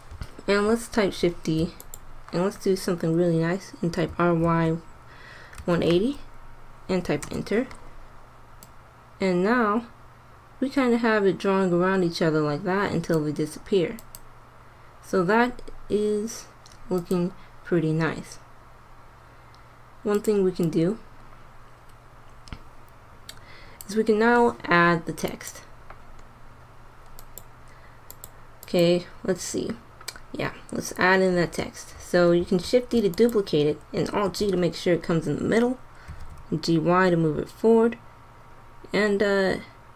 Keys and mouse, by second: 1.1 shift+d, 3.9 r, 8.7 click, 13.9-15.8 drag, 17.1-18.8 drag, 20.6-21.9 drag, 22.4-24.1 drag, 25.2-27.0 drag, 27.2-30.4 drag, 32.6 shift+d, 34.2 alt+g, 36.0 g.